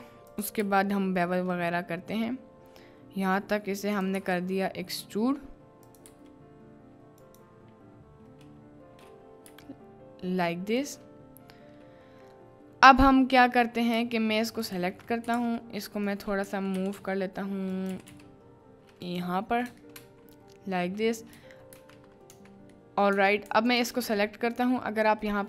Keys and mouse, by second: 22.3-23.2 typing.